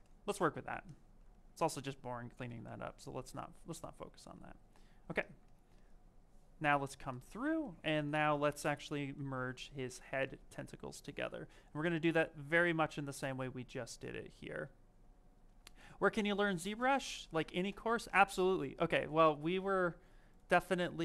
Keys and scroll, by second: 2.5 v.